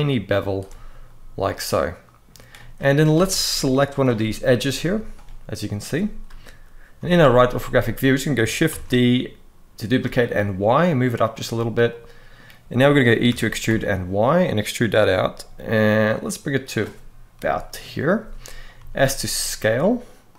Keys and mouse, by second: 0.8-2.0 middle drag, 2.3 middle click, 2.9 alt+a, 3.7 alt+shift+click, 4.7 z, 6.0 KP_3, 6.7 z, 8.4 shift+d, 9.8 y, 10.9 click, 11.6 middle click, 13.4 e, 16.3 click, 17.1 KP_1, 17.5 KP_3, 18.5 s, 20.0 click.